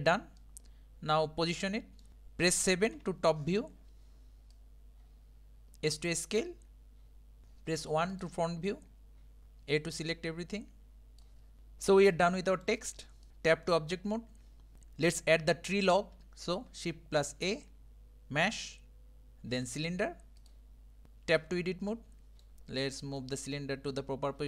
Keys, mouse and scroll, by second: 0.4-2.1 middle drag, 3.0 KP_7, 4.5 click, 8.2 click, 8.7 middle click, 9.4 a, 10.1 click, 12.1 middle click, 12.9 Tab, 13.2 click, 13.3-14.3 middle drag, 14.3 Tab, 14.7-17.2 middle drag, 17.2 shift+a, 21.4 Tab, 21.9-23.2 middle drag, 23.2 click.